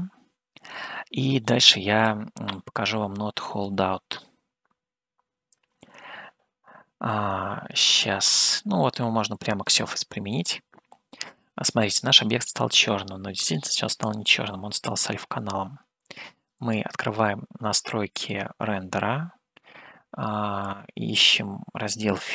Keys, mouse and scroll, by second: 2.4-4.1 drag, 5.8-9.9 drag, 16.7 click, 18.4 click, 20.7-22.3 drag.